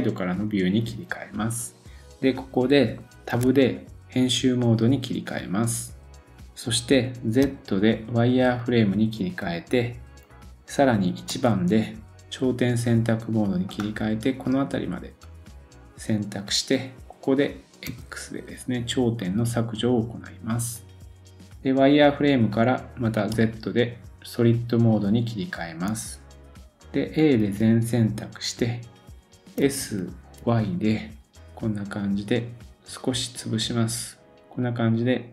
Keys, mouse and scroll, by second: 13.6 click, 20.9-24.9 drag, 20.9-24.9 middle drag, 20.9-24.9 right drag.